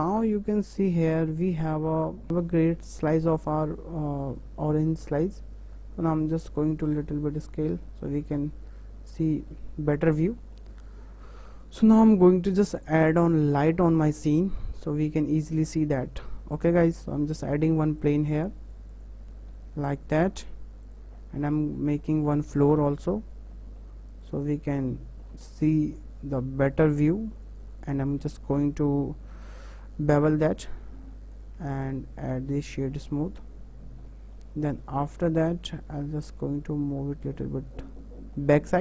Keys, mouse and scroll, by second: 0.6 Tab, 1.2 scroll down 1, 1.4-3.5 middle drag, 4.8 click, 7.8-9.5 middle drag, 9.5 scroll down 1, 9.7-11.6 middle drag, 11.6 click, 12.0 scroll down 4, 12.3-13.5 middle drag, 13.5 click, 13.9 scroll up 3, 14.2-15.5 middle drag, 15.5-15.8 scroll up 1, 15.8-19.1 shift+middle drag, 19.1 shift+a, 19.7 s, 21.1 scroll down 4, 21.4 middle click, 21.6 Tab, 22.0-24.3 shift+middle drag, 24.3 click, 24.5-25.6 middle drag, 25.6 e, 28.6 click, 29.4 ctrl+b, 31.5 Tab, 32.6 right click, 32.9 scroll down 2, 33.2-33.7 middle drag, 33.7-34.0 scroll up 4, 34.0-36.0 middle drag, 36.0 click, 36.7 click, 38.4 scroll down 4, 38.7-38.8 middle drag.